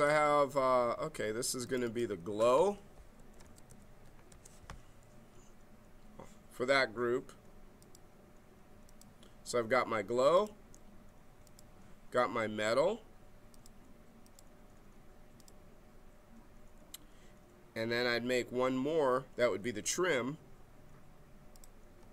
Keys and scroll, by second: 2.9-4.4 typing.